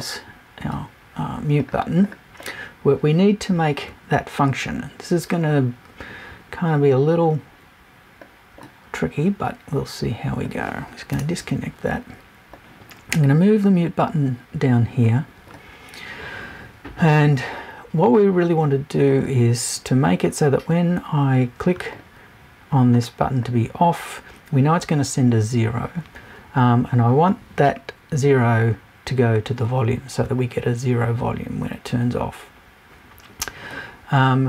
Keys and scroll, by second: 11.1 BackSpace.